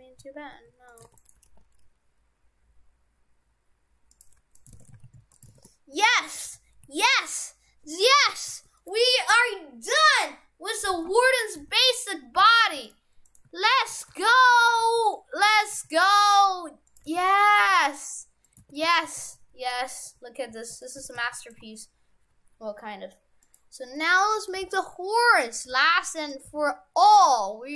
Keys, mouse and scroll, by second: 1.1 shift+d, 1.4 g, 4.6 right click, 4.8 shift+f, 5.6 shift+f, 8.3 shift+f, 11.6 shift+f, 13.3 right click, 13.8 shift+right click, 14.0 shift+f, 15.7 s, 17.1 g, 18.4 right click, 18.6 shift+f, 21.0 shift+f, 21.6 shift+a, 24.6 g, 25.7 r, 26.5 r.